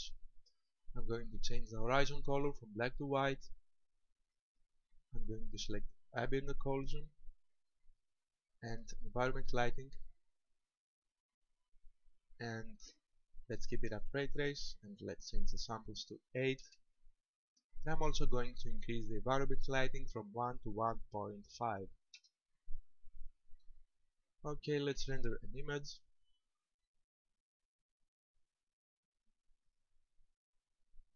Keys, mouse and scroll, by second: 2.7 click, 7.3 click, 9.9 click, 11.3-12.0 scroll down 4, 15.2 click, 20.0 click.